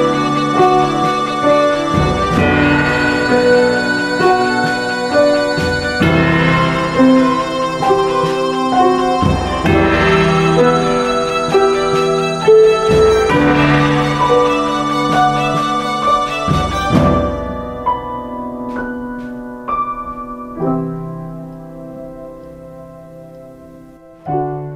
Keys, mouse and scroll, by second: 13.0 x.